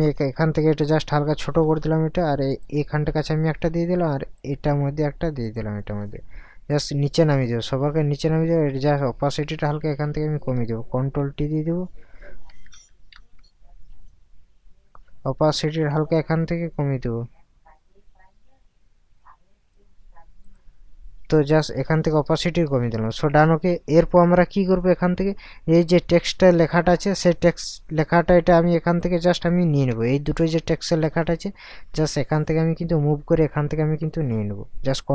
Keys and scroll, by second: 0.5 [, 11.0 ctrl+t, 12.5 Up, 13.1 Right, 21.6 ctrl+KP_Add, 22.6 ctrl+KP_Subtract.